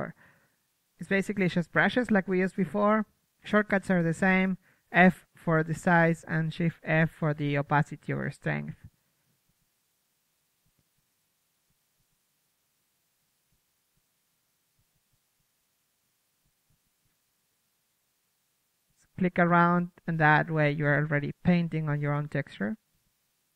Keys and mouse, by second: 1.5 t, 3.5 click, 5.6 KP_3, 6.2 f, 7.3 click, 8.3 shift+f, 9.6 f, 10.5-12.8 drag, 11.2-11.7 right drag, 19.0-22.6 drag, 22.9-23.5 middle drag, 23.1-23.5 drag.